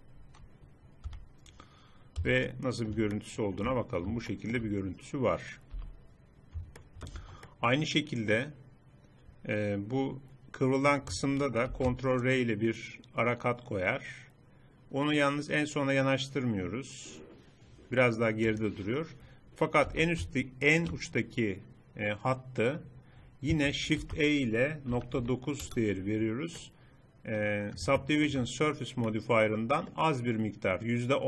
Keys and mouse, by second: 1.1 Tab, 2.2 z, 5.9 n, 7.2 Tab, 11.7 ctrl+r, 19.9 a, 24.0 shift+e, 28.5 middle click.